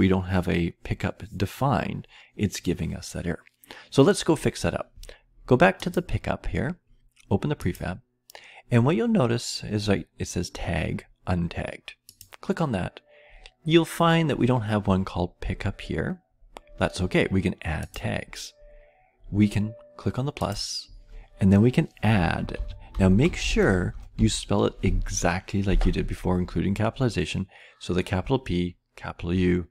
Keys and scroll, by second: 22.2-24.6 typing.